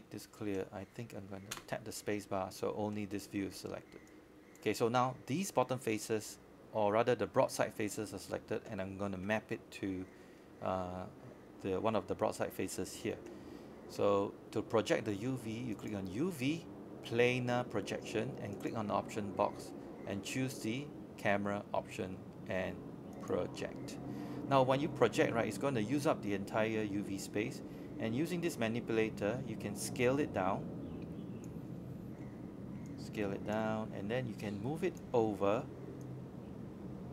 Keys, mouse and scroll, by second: 0.1 scroll up 1, 0.4 alt+middle click, 0.8 alt+click, 1.6 alt+middle click, 2.0 scroll down 1, 2.5 right click, 3.8 click, 5.0 shift+click, 5.5 shift+click, 6.3 shift+click, 6.8 shift+click, 7.2 shift+click, 8.3 shift+click, 11.3 right click, 16.4-18.0 drag, 19.0 space, 19.1-19.6 scroll down 1, 19.8 super+middle click, 21.0 click, 26.9-27.3 scroll up 1, 32.8 click.